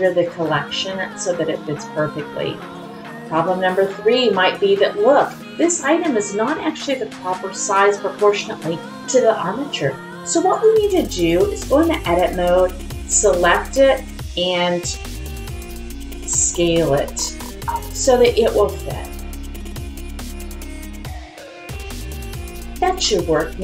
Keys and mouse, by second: 4.4-4.8 middle drag, 5.5 click, 7.0 click, 10.5-11.3 drag, 22.3 click, 23.1 middle click.